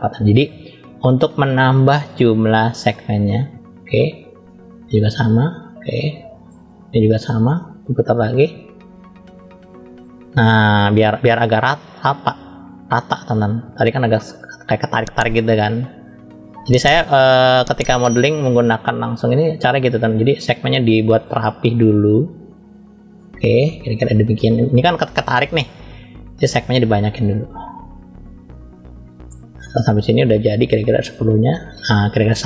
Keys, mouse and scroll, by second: 0.9 click, 1.9 scroll up 1, 1.9-3.9 middle drag, 4.3 click, 6.6 click, 7.5 middle click, 8.7 click, 11.8 middle click, 13.4 click, 14.8 middle click, 15.6 click, 16.6-17.8 middle drag, 18.6 click, 21.1 middle click, 22.4 click, 23.7 middle click, 26.5 click, 27.9 click, 28.7 middle click, 29.4 click.